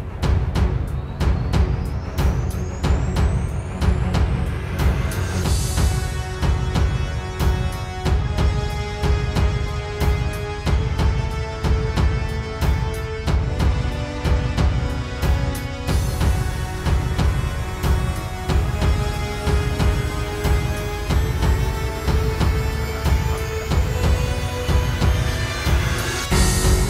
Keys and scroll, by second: 7.2 super+z, 8.9 super+z, 13.9 space, 16.5 super+z, 23.8 super+[, 25.5 super+], 26.1 super+[, 26.6 super+[.